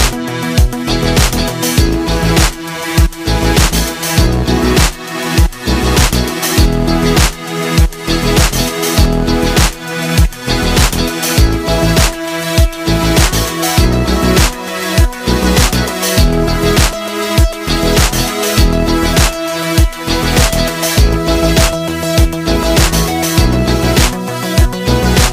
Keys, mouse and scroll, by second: 12.1 click, 25.2-25.3 drag.